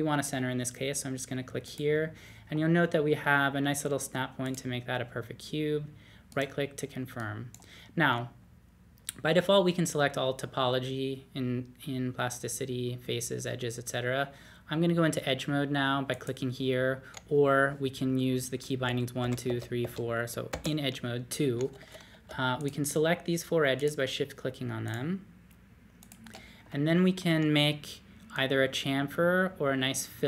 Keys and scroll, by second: 18.6-20.5 typing.